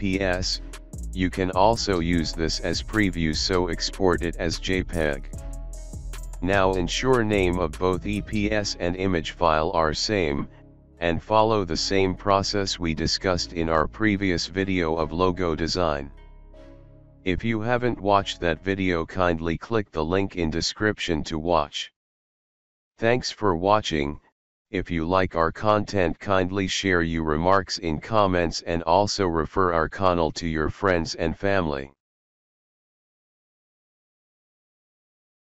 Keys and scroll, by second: 0.0-3.5 typing, 11.1 ctrl+v, 13.9 ctrl+c, 15.3 ctrl+v, 15.6 Return.